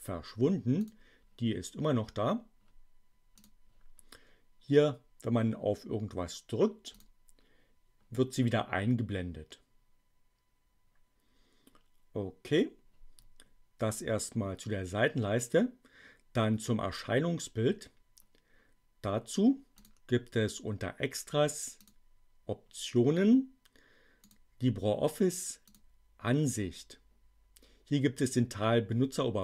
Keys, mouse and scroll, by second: 0.6 click, 3.3 click, 6.9 click, 19.6 click, 21.8 click, 24.2 click, 25.6 click.